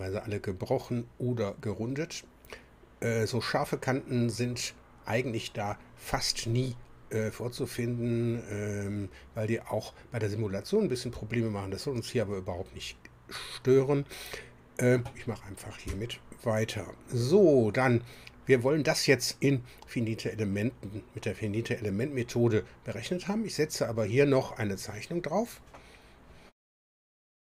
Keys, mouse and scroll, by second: 13.3-15.2 middle drag.